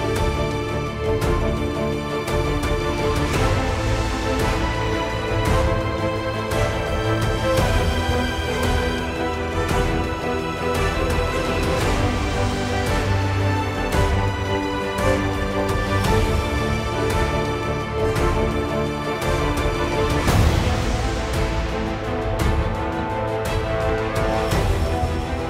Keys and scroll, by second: 18.1 ctrl+v.